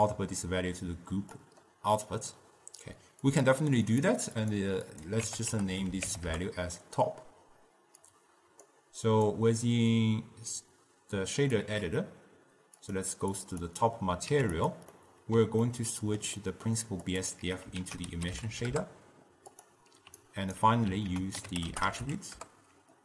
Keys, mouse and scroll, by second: 3.4 click, 4.0-4.6 drag, 5.0-12.3 drag, 12.9-14.4 drag, 14.4 q, 15.1-17.2 middle drag, 17.2 click, 17.5 x, 17.9 ctrl+a, 20.3-21.1 alt+right drag, 21.1 ctrl+a, 21.8 t.